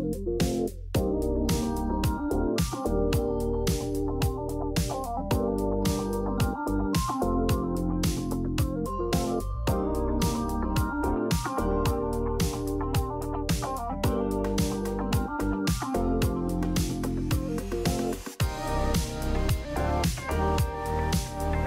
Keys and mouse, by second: 0.0 alt+z, 0.3 click, 2.7 alt+z, 3.2 shift+click, 4.0 alt+z, 4.3 click, 5.2 g, 6.8 alt+z, 7.5 click, 8.0 alt+z, 8.8 g, 12.6 s, 13.9 Tab, 14.5 middle click, 15.5 middle click, 16.3 Tab, 17.0 middle click, 18.6 click, 19.7 KP_Decimal, 21.4 ctrl+click.